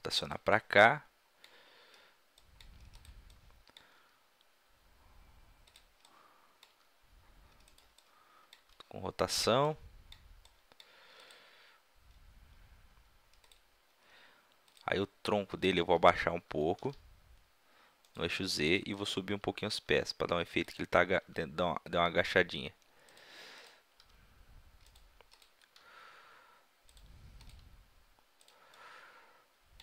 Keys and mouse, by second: 0.3-2.3 drag, 0.6 right drag, 3.7-4.7 drag, 4.0 r, 4.9-5.8 middle drag, 5.8-6.8 drag, 6.8 r, 7.6-10.5 middle drag, 8.6 r, 11.0 middle click, 12.8 click, 13.4-16.4 drag, 16.4 g, 18.1-18.7 drag, 18.7-19.4 middle drag, 19.9 r, 20.4 middle click, 20.7-22.5 drag, 21.2 r, 22.8 middle click, 23.6-26.6 drag, 23.6-25.0 right drag, 24.0 r, 25.1 right click, 25.4-26.6 right drag, 25.8 g, 27.5-29.1 drag, 27.5-29.1 right drag, 27.6 g, 29.5-29.8 middle drag.